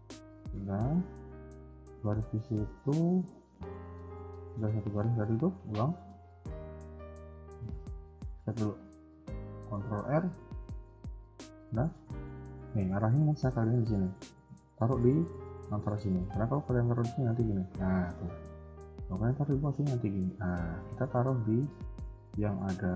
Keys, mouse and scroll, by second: 5.7 ctrl+z, 6.2 ctrl+z, 7.3 ctrl+z, 7.3 ctrl+s, 8.0 scroll down 1, 8.3 shift+middle click, 9.6 ctrl+r, 17.3 ctrl+r, 19.6 ctrl+r.